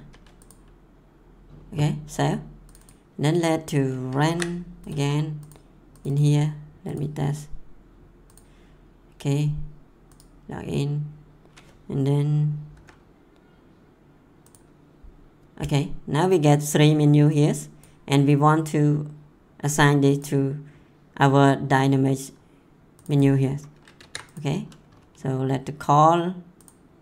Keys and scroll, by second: 4.2 ctrl+c, 12.7 F10, 24.0 ctrl+c.